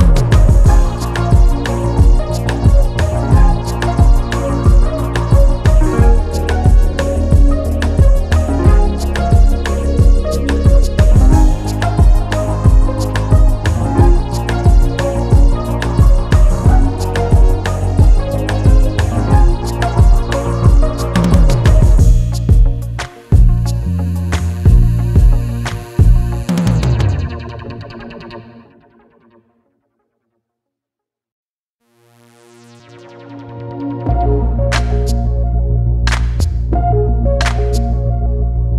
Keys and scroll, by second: 1.1 ctrl+s, 19.8 ctrl+shift+], 27.5 ctrl+t.